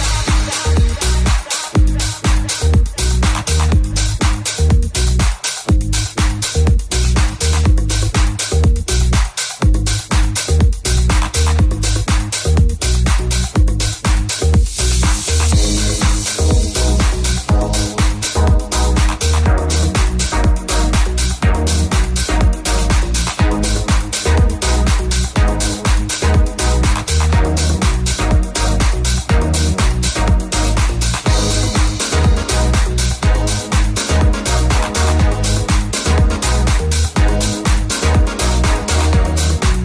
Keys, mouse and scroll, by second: 2.4 middle click, 2.4 g, 4.0 alt+middle click, 4.0 g, 4.0 alt+z, 5.1 alt+shift+z, 7.6-18.2 shift+middle drag, 8.1 ctrl+x, 8.7 r, 10.1 g, 11.4 ctrl+KP_Subtract, 12.1 g, 14.3 ctrl+KP_Subtract, 14.9 g, 15.5 ctrl+r, 16.6 ctrl+r, 18.2 ctrl+r, 20.1 ctrl+Tab, 20.5-21.8 ctrl+middle drag, 21.3 ctrl+Tab, 22.3 click, 23.0 ctrl+click, 23.7-24.8 drag, 24.8-26.8 shift+middle drag, 24.8 f, 24.9 f, 25.6 f, 26.8-38.7 ctrl+drag, 27.0 ctrl+z, 38.7-39.8 drag.